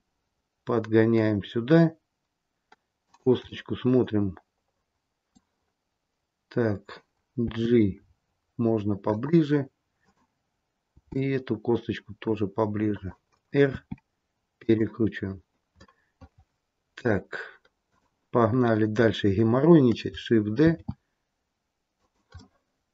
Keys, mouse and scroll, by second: 3.4 middle click, 7.5 g, 9.9 click, 10.8 g, 13.6 r, 15.7 middle click, 17.7 click, 20.6 shift+d, 22.3 middle click.